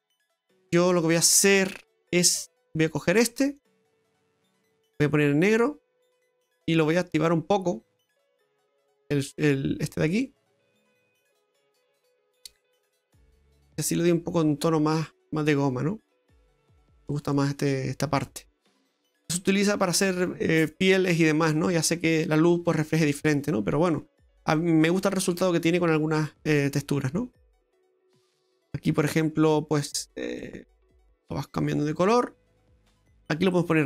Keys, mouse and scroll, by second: 0.8 middle click, 1.2-2.0 scroll up 12, 2.0 middle click, 2.4-3.2 scroll up 5, 3.6 click, 7.7 scroll up 1, 8.8 click, 10.6 middle click, 11.5 click, 14.9 middle click, 23.7-24.5 scroll down 4, 24.5 middle click, 25.4 middle click, 27.6 shift+middle click, 28.5 right click, 29.4-29.9 scroll up 2, 30.4 middle click, 31.6-32.1 scroll up 2, 32.1 middle click.